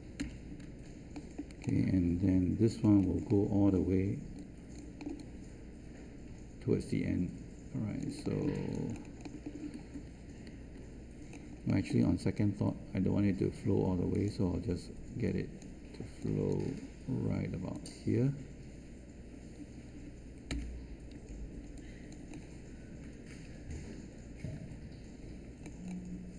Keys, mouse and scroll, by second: 0.1 Return, 20.4 Return.